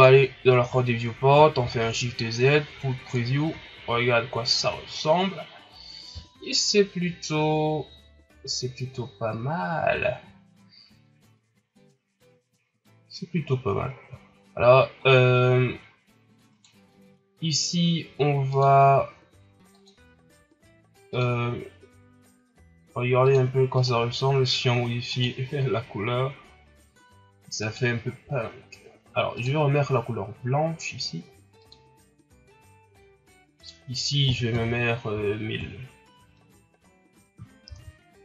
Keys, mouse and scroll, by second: 0.0 drag, 1.9 shift+z, 2.6 scroll up 1, 3.3 a, 11.5-11.8 scroll down 4, 12.1-12.5 scroll up 5, 15.0 scroll down 3, 15.7 scroll up 1, 16.5 right click, 18.7 click, 33.6-34.9 drag, 34.9 KP_0, 37.8 shift+z.